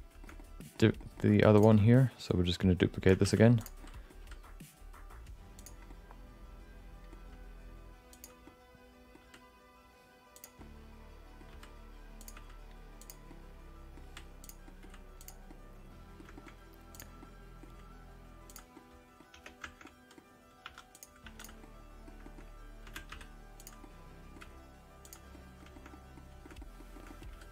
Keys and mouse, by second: 0.2 shift+middle click, 0.3 middle click, 1.0 middle click, 1.5 click, 1.9 middle click, 3.2 shift+d, 3.8 middle click, 4.2 r, 5.8-7.1 middle drag, 7.2 g, 8.4 middle click, 10.6 middle click, 11.5 r, 12.4 g, 13.3 middle click, 14.1 r, 14.7 middle click, 15.2 click, 15.5 middle click, 16.3 shift+middle click, 16.9 click, 17.2 middle click, 17.6 g, 18.7 middle click, 19.3 Tab, 19.8 middle click, 20.6 2, 20.9 click, 21.2 3, 21.4 click, 21.6 middle click, 22.2 shift+middle click, 22.8 r, 23.8 middle click, 24.4 g, 25.3 middle click, 25.7 shift+middle click, 25.9 middle click, 26.4 shift+middle click, 26.6 middle click, 26.9 shift+middle click, 27.3 r.